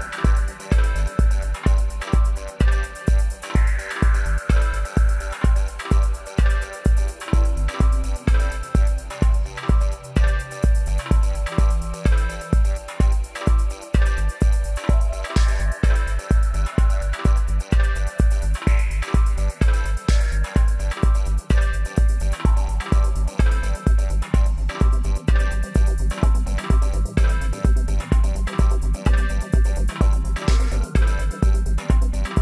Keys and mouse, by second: 2.1-4.8 drag, 4.3 alt+s, 5.5-7.7 right drag, 6.7 alt+s, 7.9 middle click, 10.4-12.9 right drag, 12.7 middle click, 12.9 w, 14.0-16.8 right drag, 15.7-18.7 drag, 18.3-22.3 right drag, 22.3 shift+d, 22.5 middle click, 23.7-25.7 middle drag, 24.2 g, 26.2 middle click, 27.0 right click, 27.7 middle click, 28.2 right click, 28.7 middle click, 28.9 click, 29.3 middle click, 29.6-32.4 right drag.